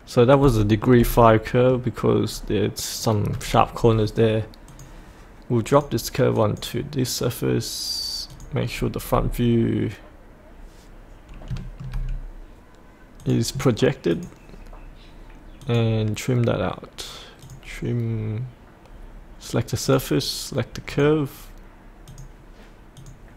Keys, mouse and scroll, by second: 0.6 shift+middle click, 1.3 middle click, 2.3-3.3 scroll down 1, 4.7 click, 8.7-11.5 scroll up 1, 13.2 click.